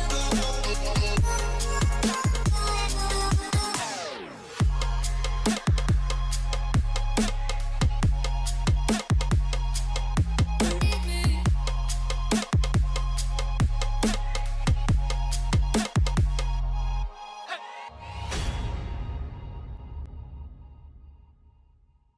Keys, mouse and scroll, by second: 6.0 double click.